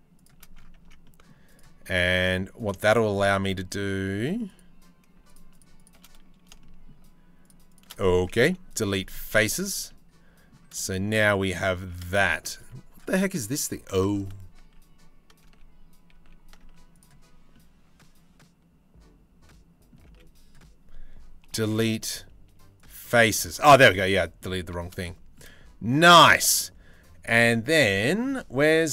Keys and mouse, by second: 0.4 Tab, 0.6 middle click, 1.6 Tab, 1.7 middle click, 2.4 middle click, 3.2 middle click, 3.8 3, 6.1-7.5 shift+middle drag, 8.1 Delete, 9.2 Tab, 10.4 shift+middle click, 11.4 Tab, 12.2 Tab, 13.9 ctrl+z, 14.4 ctrl+z, 15.2 ctrl+z, 15.8 ctrl+z, 16.6 z, 17.1-18.8 drag, 19.7 z, 21.1 Delete, 22.8 z, 23.6 click, 24.3 Tab, 25.1-27.3 middle drag.